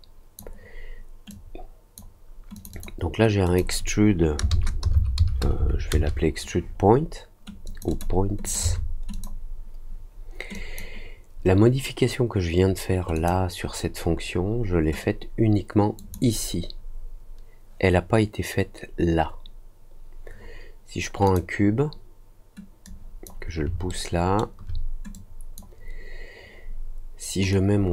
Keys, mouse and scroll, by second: 1.2-1.9 drag, 2.5 click, 2.7 click, 3.4 click, 7.6 click, 7.8 click, 8.4 click, 9.1 click, 10.5 click, 13.1 click, 15.9 click, 21.2 click, 22.8 click, 23.8 alt+middle click, 25.1 click, 27.4-27.9 drag.